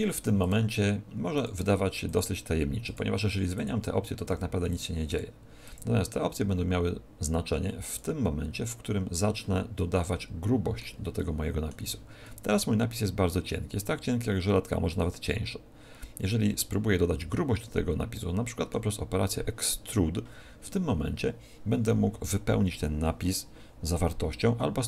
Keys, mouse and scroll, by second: 0.3 click, 2.0 click, 4.7 click, 5.6 click, 9.7 middle click, 11.1 middle click.